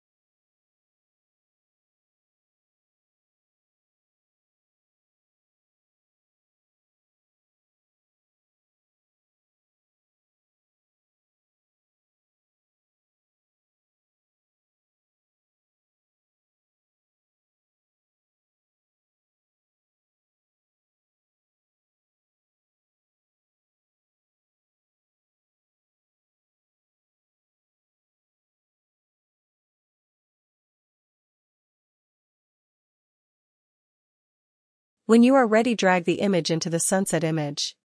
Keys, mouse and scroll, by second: 13.5 ctrl+-, 13.7 ctrl+-, 13.9 ctrl+-, 15.3 ctrl+-, 16.8 ctrl+-.